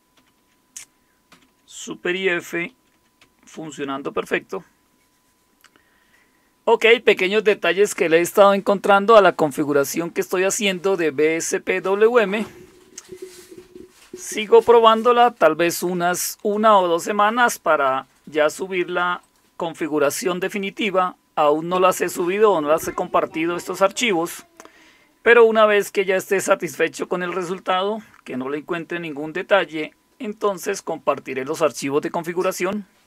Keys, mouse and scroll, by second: 0.0 super+f, 0.1 super+t, 1.3 super+f, 2.7 super+f, 3.5 super+t, 8.9 click, 19.2 click.